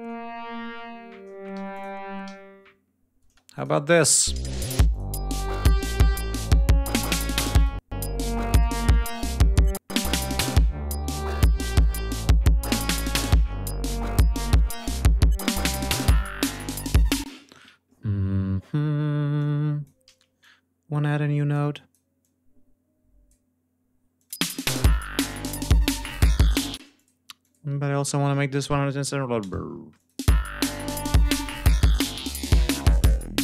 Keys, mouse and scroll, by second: 1.4 g, 1.6 click, 2.1 alt+d, 3.1 space, 3.4 click, 3.8 click, 3.9 space, 4.7 click, 5.6 click, 7.4 click, 8.4 click, 9.3 click, 13.6 ctrl+scroll down 2, 14.0 ctrl+scroll up 2, 14.5 ctrl+scroll down 2, 17.1 ctrl+space, 17.3 ctrl+d, 17.6 ctrl+scroll up 2, 19.2 click, 19.9 ctrl+y, 20.2-22.0 ctrl+drag, 22.0-23.3 drag, 24.0 click, 24.1 space, 24.9 g, 25.8 click, 26.6-30.0 typing, 26.8 click, 27.2 click, 29.3 Return, 30.0 click, 31.8 g, 32.0-32.7 drag, 32.6 ctrl+y, 33.3 d.